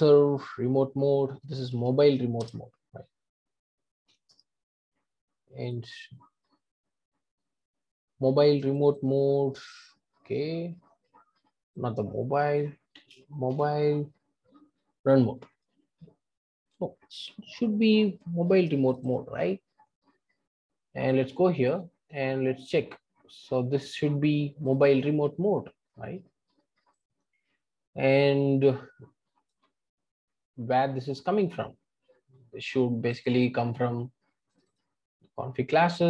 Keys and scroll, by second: 2.4 Return, 21.1 super+b.